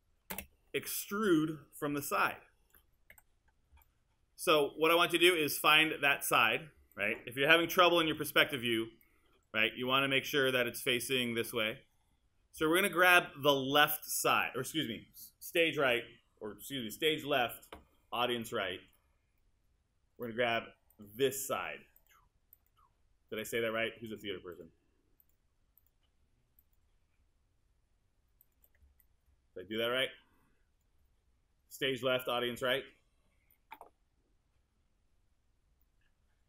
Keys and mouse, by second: 0.3 space, 3.1 1, 7.7 w.